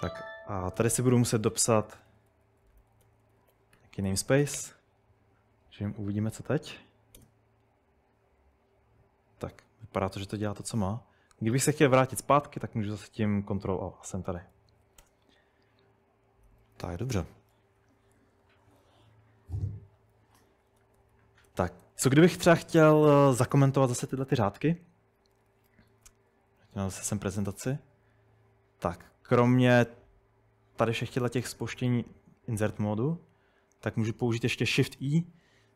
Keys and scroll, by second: 0.0-4.7 typing, 6.2 Up, 7.2 Return, 12.5 ctrl+o, 13.0 ctrl+o, 14.5-17.1 typing, 20.4-22.6 typing, 25.6 super+Tab, 25.9 super+Tab.